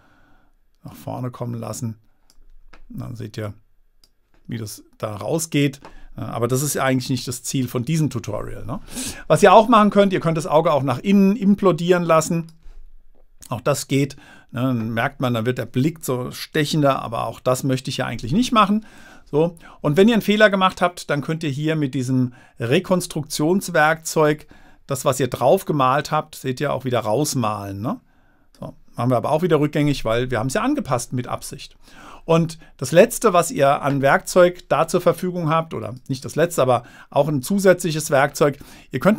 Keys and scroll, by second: 7.4 super+z, 17.4 super+z, 29.8 super+z.